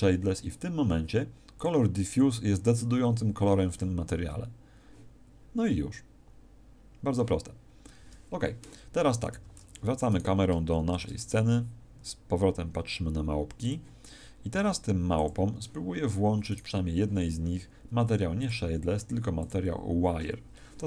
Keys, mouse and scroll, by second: 9.3 Escape, 10.1 right click, 10.9 shift+f, 13.6 click, 14.5 g, 15.2 click, 16.5 right click, 18.3 click.